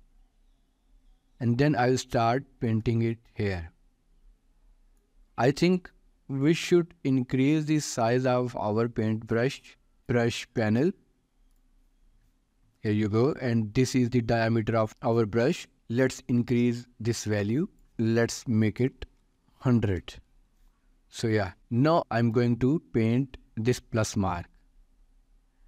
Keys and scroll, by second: 19.2 0, 19.8 Return.